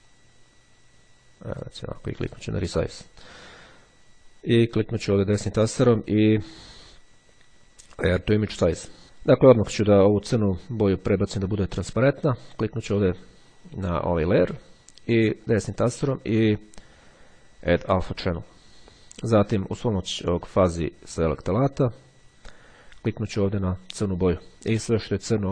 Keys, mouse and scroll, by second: 0.0-1.7 drag, 2.2 click, 3.4-4.0 scroll up 1, 5.4 click, 8.4 click, 12.9 click, 14.4-16.0 drag, 17.9 click, 20.0 click, 23.3 click.